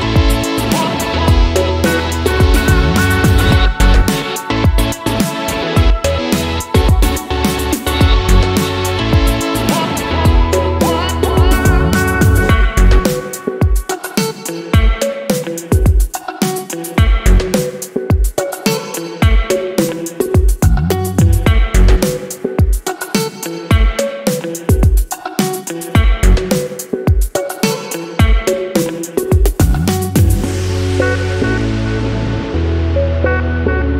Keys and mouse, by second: 1.6 s, 2.2 ctrl+a, 3.3 middle click, 3.5 a, 3.6 a, 3.7 middle click, 4.1 ctrl+p, 5.4 shift+middle click, 5.9-10.2 drag, 10.2 n, 13.1 shift+middle click, 13.3 shift+middle click, 15.4 click, 17.8 click, 20.3-24.2 shift+middle drag, 30.2 click, 30.5 shift+middle click, 32.6-33.9 drag.